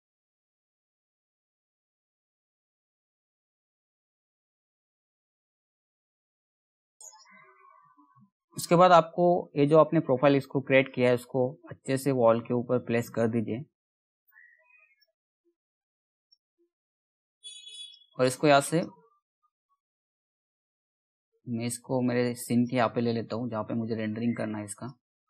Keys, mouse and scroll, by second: 0.4 scroll down 1, 0.5 click, 1.0 Delete, 1.2 click, 1.3 c, 1.6 click, 1.8 ctrl+z, 2.2 scroll down 1, 2.4-2.8 scroll up 1, 2.8 alt+click, 3.0 scroll down 1, 3.2-3.6 scroll up 1, 3.6 click, 3.7 right click, 4.0 click, 5.1 Delete, 5.3 click, 5.8 scroll down 1, 6.0 scroll up 1, 6.3 middle click, 6.4 scroll down 1, 6.6 click, 6.7 scroll up 1, 10.3 scroll up 1, 10.4-14.5 drag, 14.7 scroll, 14.8-15.4 scroll down 1, 15.4 scroll up 1, 15.7 click, 16.0 scroll down 1, 17.4 click, 18.7 scroll down 1, 19.1 middle click, 20.1-22.5 drag, 22.5-23.3 scroll up 1, 23.3 middle click, 24.4-25.2 drag.